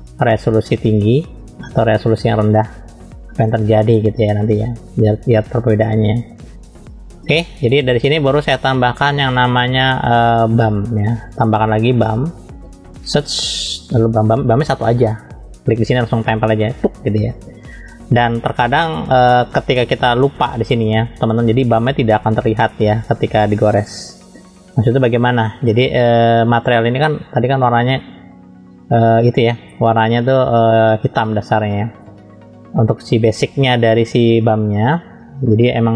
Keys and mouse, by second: 3.0 click, 4.3 click, 9.2 shift+middle click, 11.7 click, 12.9 shift+a.